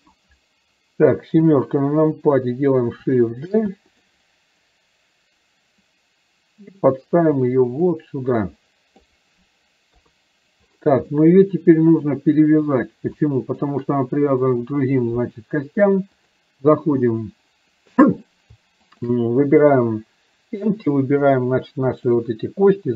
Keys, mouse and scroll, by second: 6.0-9.2 drag, 11.2-12.1 middle drag, 13.4 shift+middle drag, 16.4-17.6 drag, 19.0 shift+click, 21.4-22.4 drag.